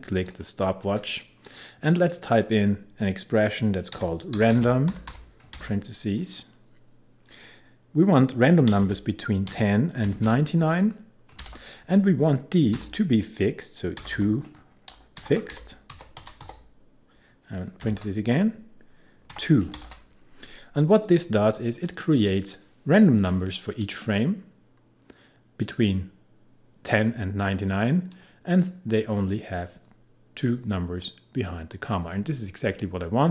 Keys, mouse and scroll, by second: 0.3-4.0 alt+drag, 3.7-6.1 typing, 8.5-11.4 typing, 12.8 typing, 13.9-17.9 typing, 19.3 2, 19.8 shift+9, 21.1 click, 23.8-30.6 drag.